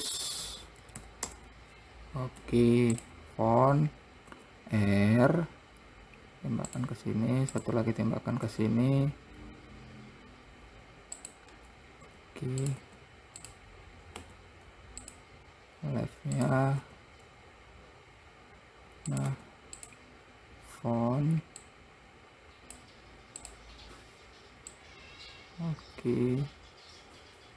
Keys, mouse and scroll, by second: 1.3 KP_0, 2.7 `, 4.6 r, 7.8 click, 8.7 r, 12.4 r, 13.1 `, 14.5 `, 16.7 click, 17.1 r, 19.6 `, 22.0 click, 23.8 click, 25.0 click.